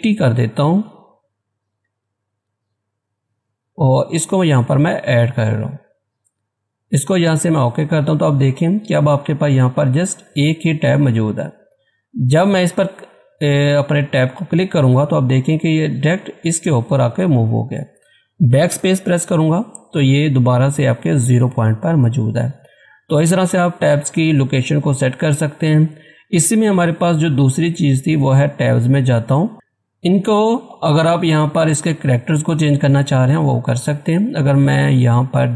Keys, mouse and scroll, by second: 1.8-2.4 typing, 4.9 click, 7.3 click, 11.4 click, 13.7-14.3 scroll up 1, 14.3 scroll up 1, 14.4 Tab, 18.7 BackSpace, 27.7 click.